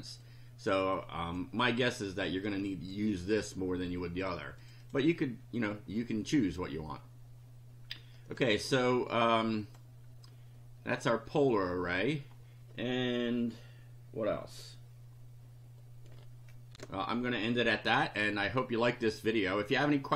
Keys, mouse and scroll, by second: 0.3 click, 1.0 click, 2.5 click, 4.6 click, 9.6 click, 16.7 ctrl+r.